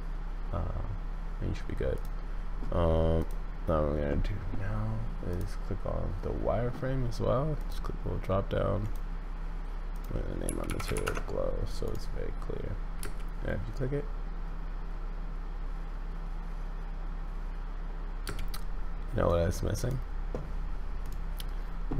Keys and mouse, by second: 3.2 click, 7.6-8.9 drag, 10.0-11.5 drag, 13.0 space, 18.2 space, 19.3 click, 21.0 click.